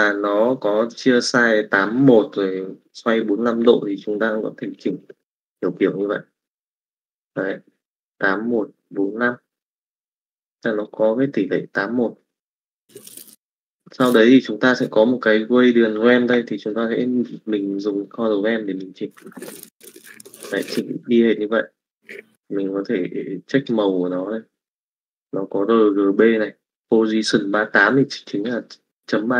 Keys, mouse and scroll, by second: 4.0-5.1 drag, 16.8 middle click, 17.8 click.